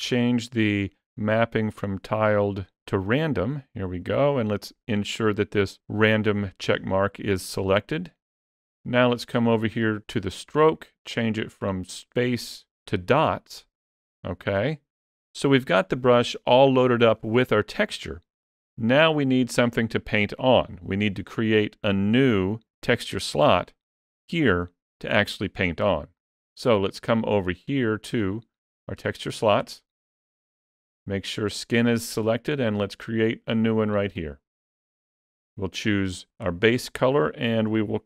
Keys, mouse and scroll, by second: 9.6 click, 21.7-22.7 scroll down 6, 22.7 middle click, 22.7 scroll down 2, 23.4-23.7 scroll up 1, 23.7 middle click, 27.0 middle click, 29.9 click.